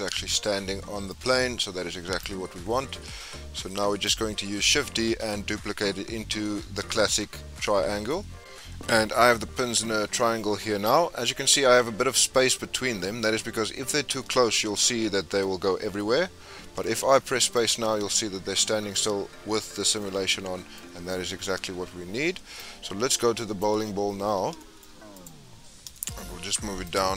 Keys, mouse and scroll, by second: 1.2 space, 2.2-4.6 drag, 4.6-7.6 middle drag, 15.7 scroll down 3, 16.0-16.9 middle drag, 16.9 space, 17.5 click, 18.0-22.1 middle drag, 22.1 space, 22.6-23.8 drag, 23.8-24.6 scroll down 10, 24.6-25.1 shift+middle drag, 25.1 click, 25.5-25.9 scroll up 5, 25.9 shift+middle click, 26.8 click.